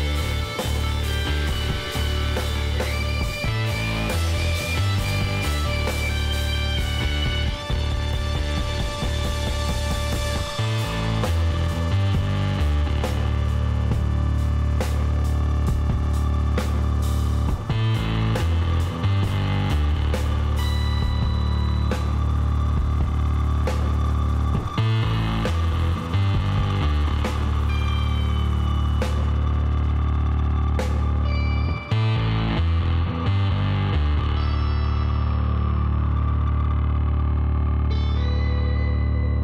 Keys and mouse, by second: 0.9-2.5 drag, 1.9-3.8 middle drag, 4.7 click, 5.4-9.2 middle drag, 9.5-11.2 drag, 11.2-12.3 middle drag, 12.3 KP_3, 14.6-19.9 drag, 18.7-23.4 middle drag, 23.4 e, 25.7-30.2 middle drag, 26.6 Tab, 27.5 a, 30.7 middle click, 31.2 Tab, 32.0 middle click, 32.8-34.4 drag, 36.8 s.